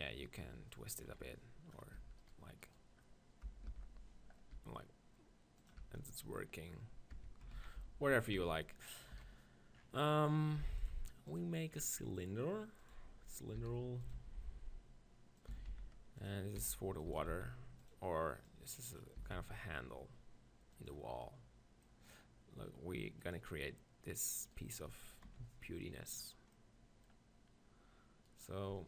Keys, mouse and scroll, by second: 0.3-1.8 right drag, 1.1 KP_3, 1.8 click, 2.0 Tab, 2.1 middle click, 2.2-4.5 drag, 3.7 ctrl+l, 4.6 r, 5.8 Tab, 6.0 middle click, 7.2 Tab, 7.6 ctrl+z, 7.8 ctrl+z, 8.4 Tab, 9.1 KP_1, 9.8-11.1 middle drag, 11.1-12.7 drag, 13.6 middle click, 13.6 s, 14.1-15.9 drag, 14.1 g, 15.5 s, 16.3-18.1 drag, 16.6 s, 17.1 s, 18.4-20.3 drag, 19.2 s, 20.8-22.7 drag, 22.7 middle click, 23.2-25.1 drag, 24.4 right click, 25.3 click, 28.3-28.8 drag.